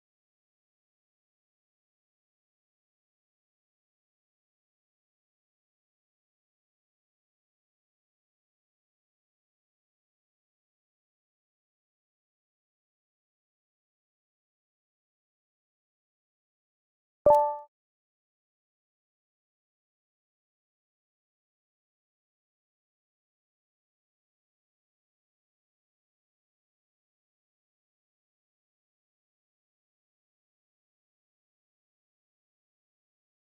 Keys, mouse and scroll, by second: 0.6-1.6 drag, 3.9 Delete, 5.0 click, 6.0 click, 7.7 a, 8.2 g, 9.1 z, 9.6 1, 10.9 Return, 11.5 click, 14.7 ctrl+2, 16.4 ctrl+2, 16.7 ctrl+2, 20.0 ctrl+2, 20.1 ctrl+2, 24.9 click, 29.3-29.8 drag, 30.4 click, 30.8 click.